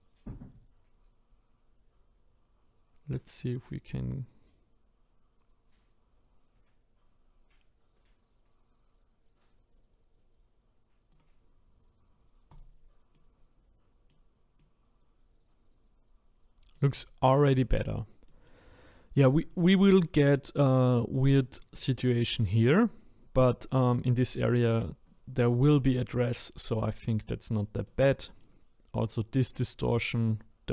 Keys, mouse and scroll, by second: 12.6 click, 13.1-19.0 middle drag, 19.0-19.5 scroll up 1, 19.5-23.2 shift+middle drag, 23.2-26.5 scroll down 1, 26.5-27.1 scroll down 4, 27.1-30.7 middle drag.